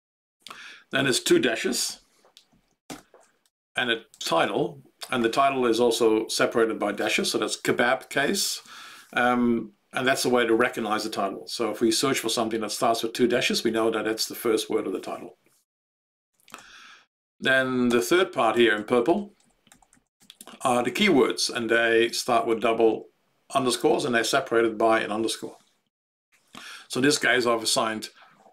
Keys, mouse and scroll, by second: 0.5 Right, 1.8 ctrl+g, 2.4 Left, 2.8 ctrl+space, 3.4 ctrl+Right, 3.6 ctrl+Right, 3.8 ctrl+Right, 4.1 ctrl+Right, 4.4 ctrl+Right, 16.5 ctrl+g, 17.8 ctrl+space, 18.5 ctrl+Right, 18.7 ctrl+Right, 18.9 ctrl+Right, 19.1 ctrl+Right, 19.4 ctrl+Right, 19.6 ctrl+Left, 19.9 ctrl+Left, 20.1 ctrl+Right.